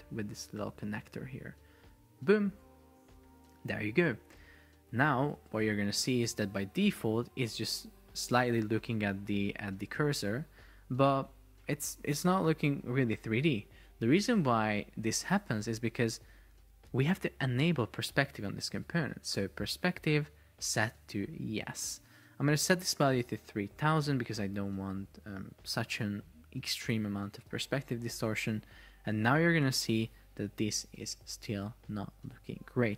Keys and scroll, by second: 5.5 super+p, 10.5 Escape, 24.1 Delete, 25.2 Return, 27.6 super+p, 32.3 Escape.